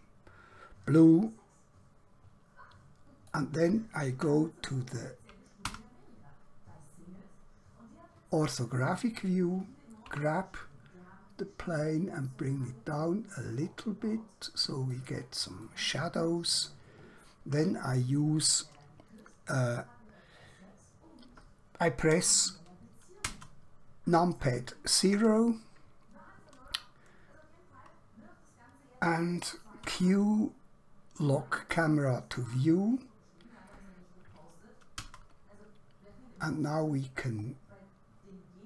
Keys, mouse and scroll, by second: 3.4 click, 5.7 KP_1, 10.0 g, 15.0 click, 15.7 middle click, 17.0 scroll down 1, 17.6 scroll up 1, 23.2 KP_0, 29.8 q, 31.6 click, 34.9 KP_0, 37.0-37.4 scroll up 1, 37.6 scroll down 1.